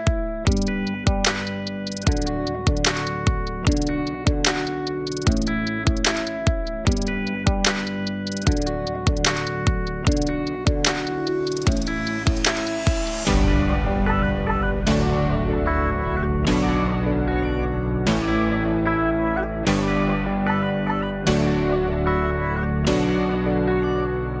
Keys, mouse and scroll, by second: 0.5 g, 3.2-4.8 alt+middle drag, 4.8-6.5 drag, 6.5 r, 9.1 alt+click, 9.7 alt+middle click, 10.2-10.7 scroll up 5, 10.7 alt+middle click, 11.4 s, 23.0-23.6 scroll down 1, 23.6-24.4 alt+drag.